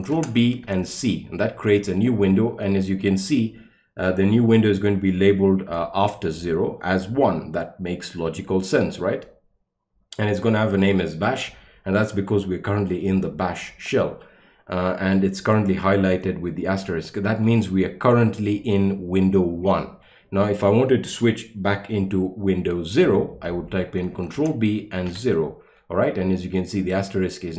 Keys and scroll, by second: 0.1 ctrl+b, 0.6 c, 24.4 ctrl+b, 25.1 0.